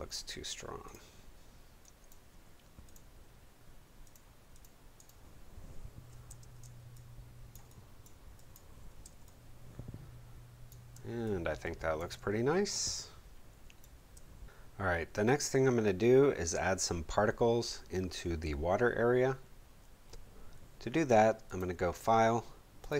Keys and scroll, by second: 6.2 space, 9.0 space.